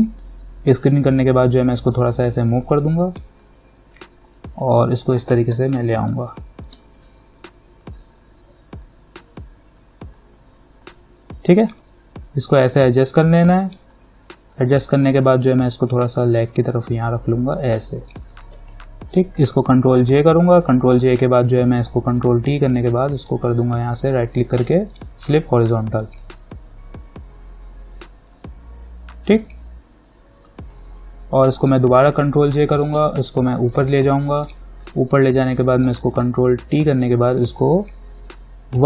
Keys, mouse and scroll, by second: 2.8-5.9 alt+drag, 5.9 ctrl+=, 6.3 space, 6.4 click, 6.8 space, 7.2-11.0 drag, 11.0-14.1 alt+drag, 14.1-18.2 alt+drag, 18.8 space, 18.9 click, 19.3 space, 20.1 ctrl+j, 20.9-22.4 drag, 22.4 ctrl+t, 23.4 right click, 24.8-30.9 drag, 32.1 ctrl+j, 32.6 space, 33.0 click, 33.8 click, 34.0 space, 34.4 click, 34.5 space, 36.4 ctrl+t, 37.7 right click.